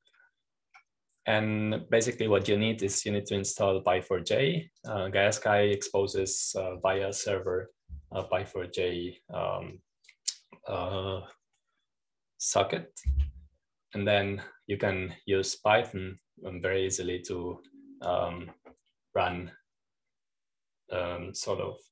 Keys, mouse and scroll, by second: 0.1 middle click, 1.6 click, 2.5-3.6 scroll up 1, 3.6-4.0 scroll down 1, 5.5-7.6 drag, 11.6 click, 19.2 click.